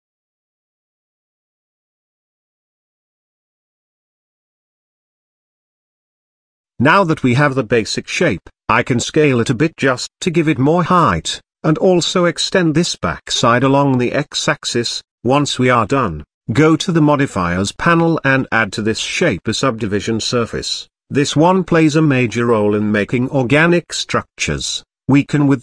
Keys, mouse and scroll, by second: 0.0 f, 0.6 click, 1.3 f, 1.7-2.1 middle drag, 2.1 z, 2.3-2.8 scroll down 1, 2.8 shift+middle click, 3.2 Tab, 3.5-5.3 middle drag, 5.3-5.6 shift+scroll up 1, 6.3-6.6 shift+middle drag, 6.6 click, 7.8-8.2 scroll down 1, 8.2 s, 11.5-13.5 middle drag, 13.5 Tab, 13.8 click, 14.2 z, 14.6 click, 15.2 g, 16.2 z, 16.7 Tab, 17.1-18.5 middle drag, 18.5 click, 19.0-20.9 drag, 20.9-21.4 scroll down 1, 21.4-24.0 middle drag, 25.4-25.6 drag.